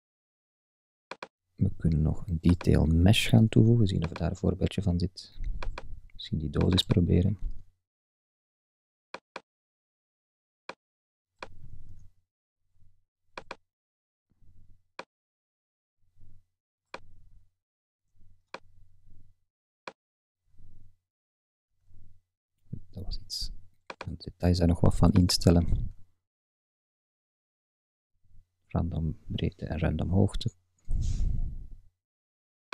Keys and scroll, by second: 11.9 super+z, 21.7 super+z.